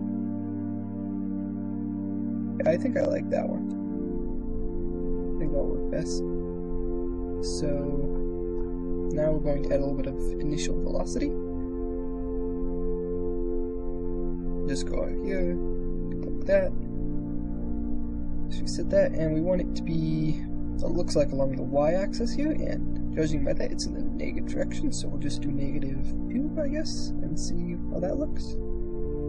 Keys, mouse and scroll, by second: 2.6-4.1 middle drag, 4.1 shift+space, 4.1 middle click, 5.2 KP_0, 11.2 middle click, 14.2-15.4 drag, 17.7 ctrl+r, 18.0 click, 19.0 click, 19.0 middle click, 19.5 click, 19.7-20.8 middle drag, 24.4-26.5 drag, 27.8 ctrl+r, 28.3 shift+space.